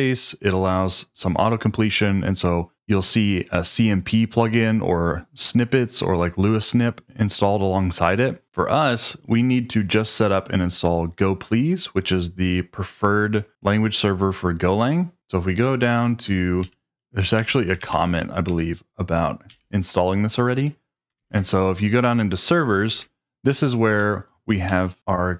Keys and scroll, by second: 16.6-18.4 typing, 18.4 Return, 19.5 n, 21.1 shift+v, 22.9 Escape, 23.9-24.6 typing.